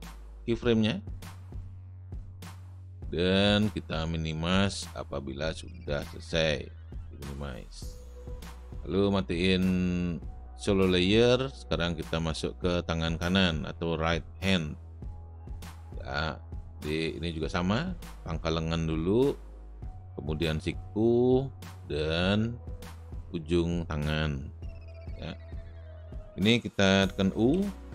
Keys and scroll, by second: 15.8 space, 27.5 u.